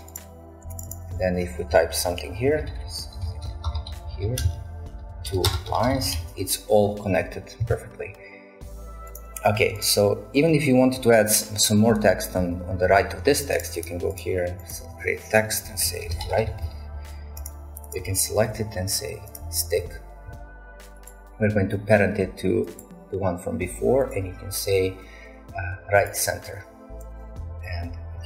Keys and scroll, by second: 0.0-0.6 typing, 2.2-6.7 typing, 15.8-16.9 typing.